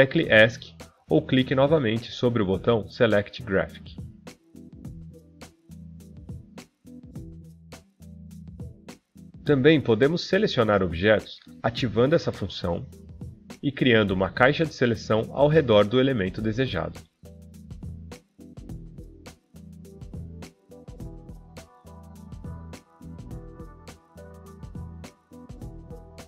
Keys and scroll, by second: 1.7 Escape.